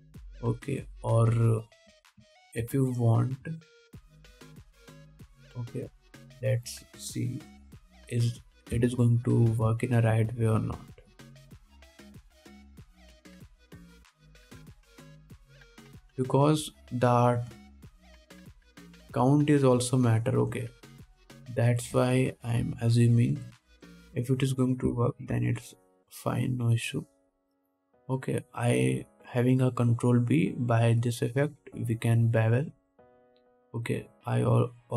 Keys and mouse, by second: 0.4-11.3 drag, 2.2 middle click, 2.2 right click, 3.1 Tab, 3.5 alt+a, 3.9 ctrl+s, 7.2 2, 7.6 alt+middle click, 7.6 alt+right click, 9.1 F3, 10.7 alt+a, 11.3 1, 11.6-13.6 alt+drag, 11.6 2, 14.6 shift+click, 15.3 alt+shift+middle click, 15.4 alt+shift+click, 15.9 click, 16.0 click, 16.2-34.9 shift+drag, 21.4 alt+shift+middle click, 21.4 alt+shift+right click, 22.5 alt+shift+middle click, 22.5 alt+shift+right click, 26.5 ctrl+b.